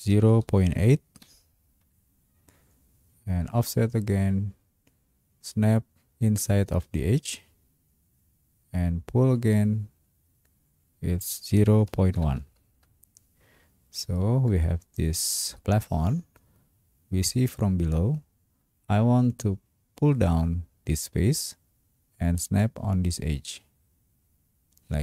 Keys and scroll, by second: 0.1 0, 0.7 ., 1.2 8, 1.8 Return, 11.6-12.9 typing.